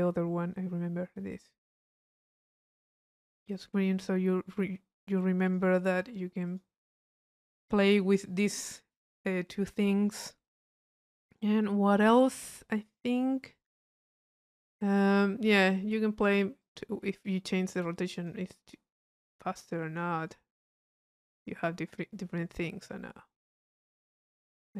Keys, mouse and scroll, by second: 0.4 middle click, 1.4 click, 3.5-4.8 drag, 5.4-7.1 drag, 10.1 middle click, 10.1-10.4 scroll up 1, 10.4-12.4 drag, 12.6 click, 13.5 click, 16.6 click, 18.0 click, 20.2 click, 21.0 click.